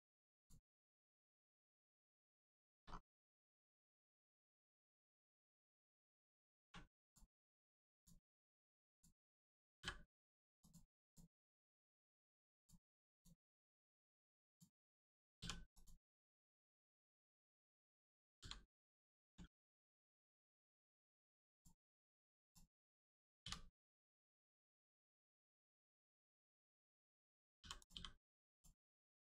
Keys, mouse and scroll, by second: 0.3 click, 0.4 click, 2.1 scroll up 1, 2.5 shift+middle click, 2.8 scroll up 1, 3.7 shift+middle click, 4.0 scroll up 1, 4.6 middle click, 5.1 shift+middle click, 5.4-6.0 scroll up 1, 6.0 middle click, 6.6 1, 7.0 click, 10.6 click, 11.6 Tab, 12.5 click, 15.7 click, 18.3 g, 18.8 right click, 19.2 scroll down 1, 19.3 Tab, 19.7 middle click, 20.0-20.3 scroll down 1, 20.4 middle click, 20.8 right click, 21.4 click, 23.7 middle click, 26.2 click, 26.7 middle click, 27.7 click, 27.8 h, 28.4 click, 28.7 middle click.